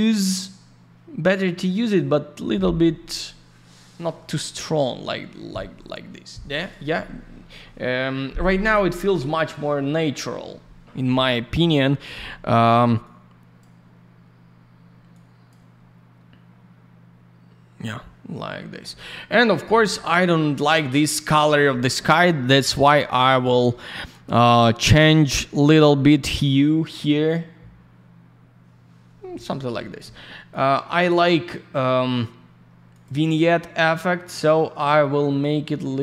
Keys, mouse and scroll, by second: 8.7 scroll up 1, 9.4 scroll up 1, 9.8-10.2 scroll down 1, 13.0 click, 15.1 click, 22.4-22.7 scroll up 1, 22.7 middle click, 23.1 click, 23.2 click, 23.2 click, 23.4 double click, 25.7 click, 30.5 click, 30.6 click, 32.9 click, 33.0 click, 34.4 click, 35.6 click.